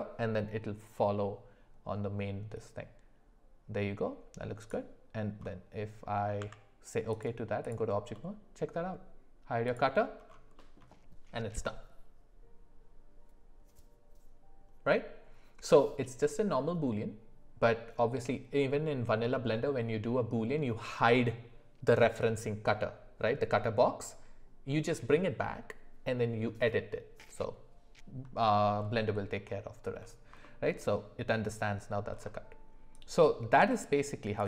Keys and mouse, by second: 6.4 Tab, 7.6 click, 8.1 middle click, 9.6 click, 10.5 middle click, 30.4 shift+middle drag.